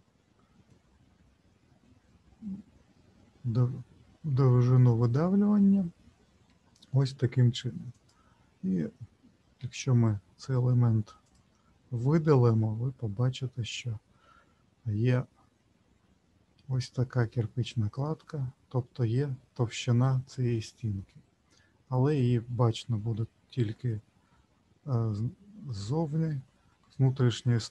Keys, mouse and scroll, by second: 7.9 click, 9.5 Delete, 12.2-12.6 scroll up 3, 13.0-14.5 scroll up 2, 14.5-16.2 scroll down 3, 17.7-18.6 scroll down 4, 18.6-21.1 scroll up 1, 23.2 middle click, 24.3-25.2 scroll up 1, 25.2-25.8 scroll up 2, 25.8-27.7 scroll up 19.